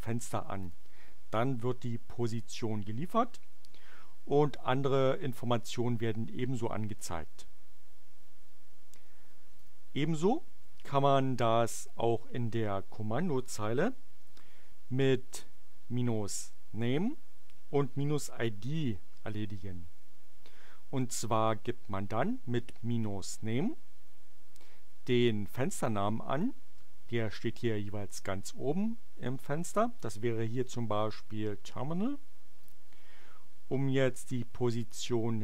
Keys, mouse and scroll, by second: 0.5 click, 9.5 click, 32.5 click.